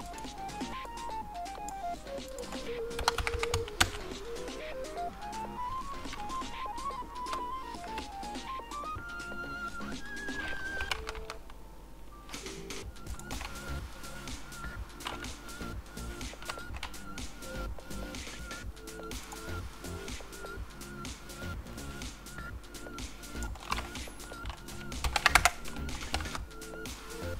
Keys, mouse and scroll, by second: 0.0-13.1 drag, 3.3 KP_0, 3.9 KP_Enter, 7.3 z, 16.4 z, 19.8 click, 24.2-25.0 scroll, 25.4 Return.